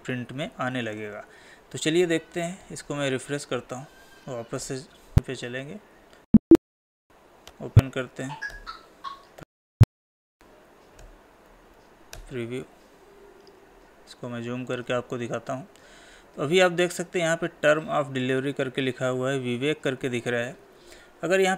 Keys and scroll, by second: 1.4 Escape, 4.5 ctrl+p, 5.4 Escape, 10.0 ctrl+p, 11.7 Left.